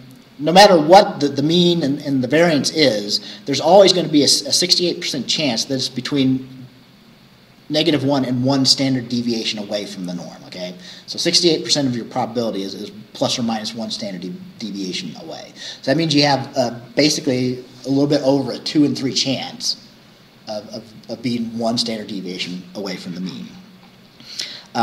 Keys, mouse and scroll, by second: 3.2 scroll down 2, 23.6-24.1 scroll down 4.